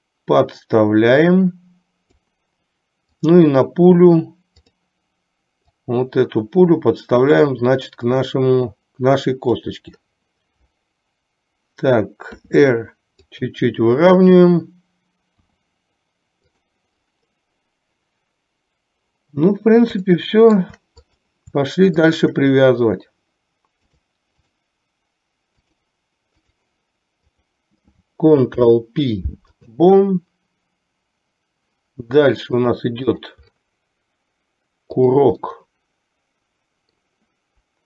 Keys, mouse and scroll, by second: 3.4 click, 6.0-7.6 drag, 8.2-9.9 drag, 12.5 r, 20.2-20.7 shift+middle drag, 22.1 shift+click, 24.0-24.9 drag, 25.9 click, 28.6 ctrl+p, 32.7 click, 35.6-37.1 middle drag.